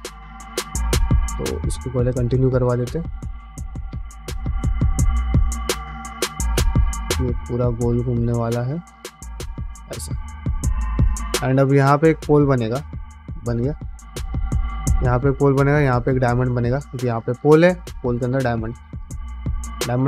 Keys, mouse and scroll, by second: 0.6 click, 0.8 ctrl+z, 1.1 click, 1.4 middle click, 2.0 f, 2.8 click, 3.0 middle click, 3.3 f, 4.2 click, 4.4 middle click, 4.9 middle click, 5.6 ctrl+r, 6.5-12.3 typing, 6.7 click, 7.0 middle click, 7.6 click, 7.8 middle click, 8.7 middle click, 9.2 click, 9.6 middle click, 10.0 middle click, 10.5 click, 11.1 click, 12.1 middle click, 13.0 middle click, 13.7 click, 14.0 f, 16.1 middle click, 16.9 click, 18.1-20.0 typing, 18.3 click, 19.6 click.